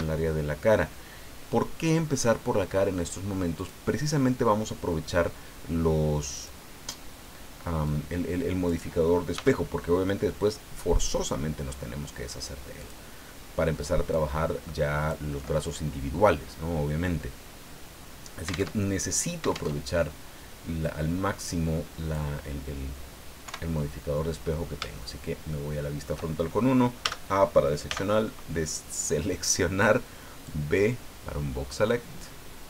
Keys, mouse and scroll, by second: 3.5 click, 6.3 click, 7.8-8.8 drag, 9.3 s, 12.8 click, 14.1-15.3 drag, 18.7 alt+Tab, 19.7 alt+Tab, 20.8-22.3 drag, 23.4 KP_1, 24.4-24.8 scroll up 3, 24.9-26.2 shift+middle drag, 27.0 a, 27.8 b, 30.5-32.6 drag.